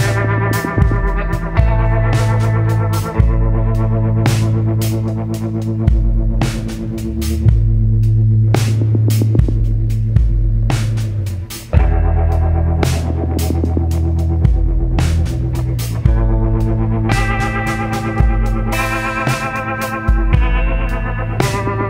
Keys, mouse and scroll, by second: 7.2 click, 8.9 click, 13.5-15.2 drag, 15.2-17.2 shift+drag, 17.1 ctrl+z, 18.5-21.8 shift+drag.